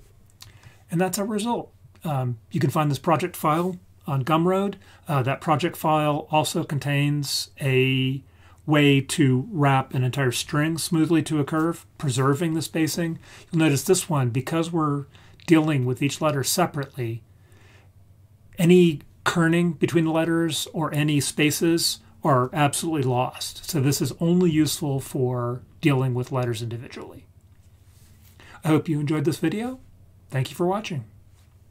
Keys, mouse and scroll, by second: 1.4-2.3 scroll down 2, 2.3 scroll down 1.